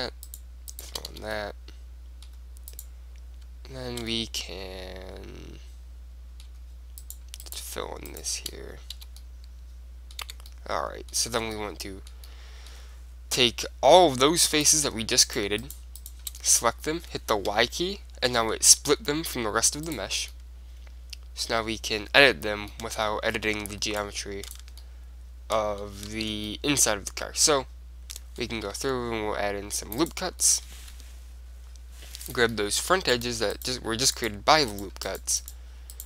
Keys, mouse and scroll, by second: 1.2 f, 1.5-3.3 middle drag, 2.9-4.8 right drag, 4.2 middle click, 4.6 middle click, 4.9-6.0 middle drag, 7.1-9.9 right drag, 9.1 f, 9.3 click, 9.9 middle click, 10.4 Tab, 11.4 Tab, 13.2 click, 13.9 middle click, 14.8-16.5 drag, 15.4-17.8 right drag, 16.5 middle click, 17.6 y, 17.8 middle click, 18.4-20.1 middle drag, 18.8 g, 20.5-22.1 middle drag, 22.9-24.6 middle drag, 24.1-25.8 drag, 24.9-26.1 middle drag, 26.2 ctrl+z, 26.7-28.5 middle drag, 28.9 ctrl+r, 30.2 right click, 30.5-31.9 drag, 30.5-32.4 middle drag, 32.4-34.0 drag, 32.8-34.4 middle drag, 33.3 right click, 34.4-36.0 right drag.